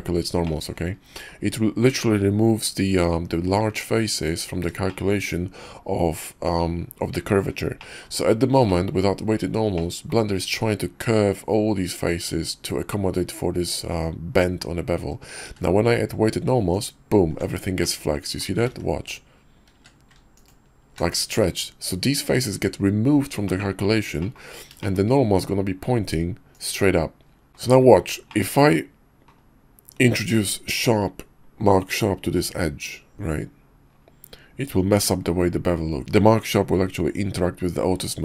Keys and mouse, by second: 0.4 middle click, 1.1 middle click, 4.9 shift+middle drag, 7.8 click, 8.7 click, 9.7 click, 15.4 q, 17.8-18.4 drag, 18.7 ctrl+z, 19.7 q, 23.5 middle click, 24.2 middle click, 24.8 shift+middle click, 26.5 click, 27.5 click, 27.5 KP_5, 28.3 shift+click.